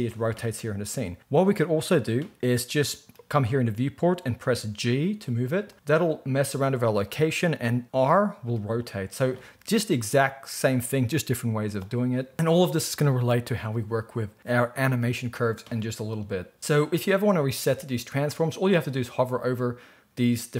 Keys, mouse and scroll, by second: 4.7 g, 7.9 r.